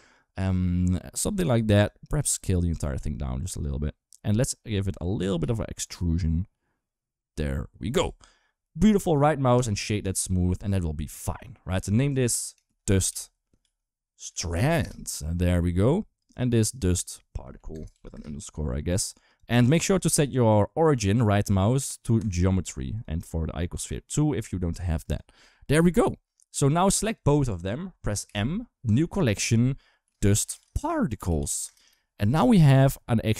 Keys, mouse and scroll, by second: 1.6 click, 2.7 s, 3.9 middle click, 5.2 e, 7.7 Tab, 9.8 click, 10.7 middle click, 11.9 F2, 16.0 click, 16.1-17.9 drag, 19.7-22.7 right drag, 22.7 click, 26.6 drag, 28.0 m, 31.6 Return.